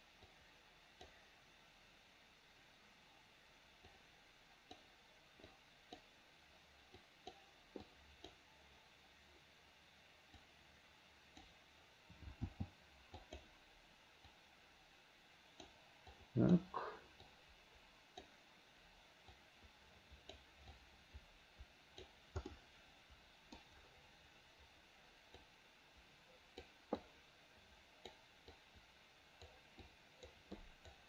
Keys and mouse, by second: 0.4 click, 4.0 click, 5.7 click, 7.2 click, 8.0 click, 10.5-11.6 right drag, 12.5 f, 14.4-15.8 right drag, 16.3 right click, 17.4 right click, 19.4-20.5 right drag, 20.9-22.2 right drag, 22.7-23.7 middle drag, 25.5-26.7 drag, 27.2-28.2 drag, 28.7 click, 30.0 click, 30.7 click.